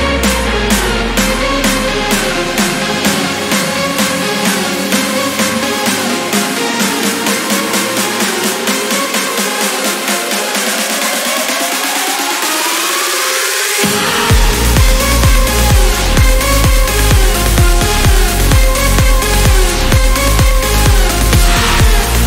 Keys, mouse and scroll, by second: 0.7-1.1 scroll up 2, 1.3 scroll down 2, 2.6 click, 4.4 ctrl+scroll down 2, 4.7 ctrl+click, 6.7 ctrl+click, 8.3 click, 8.8 click, 9.1 click, 11.0 Delete, 11.9 Escape, 13.0 0, 13.7 scroll down 2, 14.1 scroll up 2, 15.4 click, 15.8 click, 17.4 click, 19.4 click, 21.1 click.